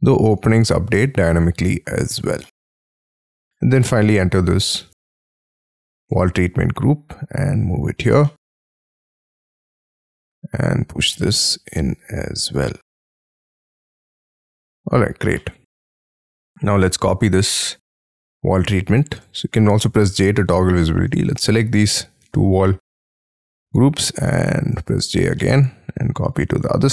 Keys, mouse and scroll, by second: 0.3 shift+click, 1.2 middle click, 1.2 space, 2.0 Escape, 2.5 middle click, 3.6 double click, 3.9 double click, 4.1 double click, 4.5 double click, 4.8 m, 6.8 shift+scroll up 4, 7.6 shift+click, 7.9 scroll down 6, 8.0 space, 8.3 middle click, 9.0 double click, 9.4-10.8 scroll up 6, 10.8-11.6 scroll down 12, 11.1 middle click, 12.8-13.6 scroll down 15, 12.9 space, 13.6 Escape, 14.0 scroll down 7, 14.4 shift+middle click, 15.0 Escape, 15.3 middle click, 16.2 scroll down 7, 17.6 double click, 17.9 double click, 18.2 middle click, 18.6 scroll down 6, 19.2 j, 19.8 j, 20.2 j, 21.3 ctrl+click, 22.2 m, 23.0-23.7 scroll up 13, 24.1-25.4 scroll down 17, 24.7 j, 25.4 middle click, 25.9-26.6 scroll up 12.